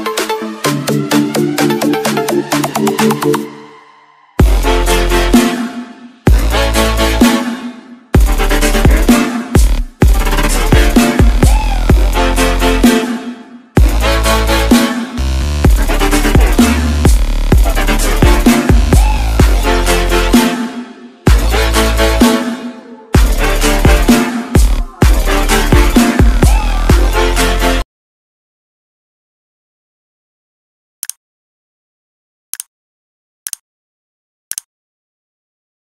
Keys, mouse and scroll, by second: 0.5 Delete, 0.7 click, 1.1 Delete, 1.3 Left, 2.6 click, 3.5 alt+Tab, 3.8 click, 4.6 c, 4.8 Tab, 5.1 click, 5.5 v, 5.6 click, 5.9 Left, 6.9 0, 7.6 s, 7.9 scroll down 1, 8.4 ctrl+s, 9.6 click, 22.7 ctrl+c, 23.0 click, 23.5 v, 25.2 click.